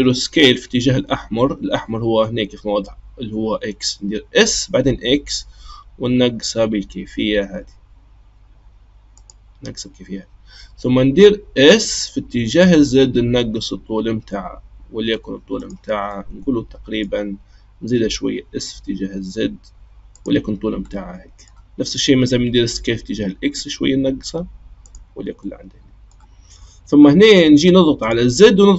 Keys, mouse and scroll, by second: 4.3 s, 11.8 s, 16.1-17.9 middle drag, 17.9 s, 20.9-22.5 middle drag, 22.5 s, 25.4-28.0 middle drag, 28.0 click.